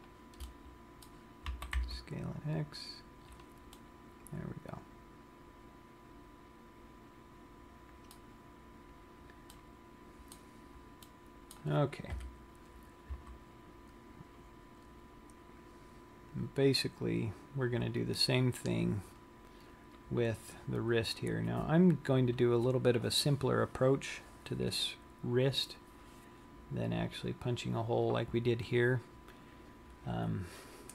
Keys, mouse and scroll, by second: 0.2 shift+click, 0.7 middle click, 1.6 s, 3.5 click, 4.0 middle click, 8.8 scroll down 1, 9.7 middle click, 11.4 middle click, 12.3 KP_3, 13.6 z, 14.9-15.8 scroll up 3, 16.0-16.7 scroll down 1, 17.5-18.3 scroll up 2.